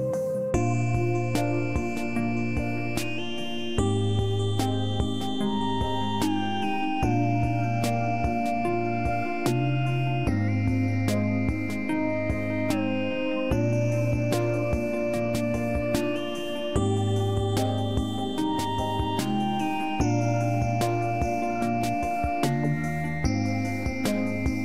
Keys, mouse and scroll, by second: 2.4 click, 5.1 click, 10.4 click, 15.2 click, 19.0 scroll down 1, 20.5 click.